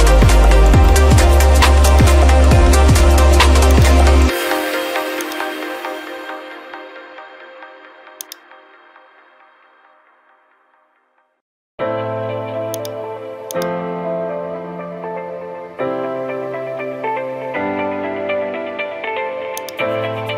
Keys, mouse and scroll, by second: 0.0 ctrl+click, 0.3 ctrl+click, 1.2 scroll, 2.1 ctrl+click, 2.9 middle click, 3.9 ctrl+click, 4.9 scroll, 5.3 click, 8.3-9.4 drag, 12.9 click, 14.2 middle click, 14.2-14.8 scroll, 15.8-16.7 scroll, 17.7-18.5 scroll, 19.7 click.